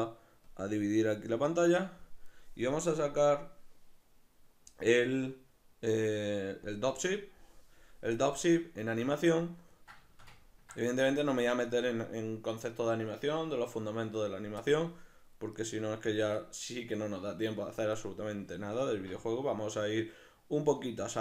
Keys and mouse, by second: 9.3-15.6 ctrl+middle drag, 15.6 right click, 16.3 right click.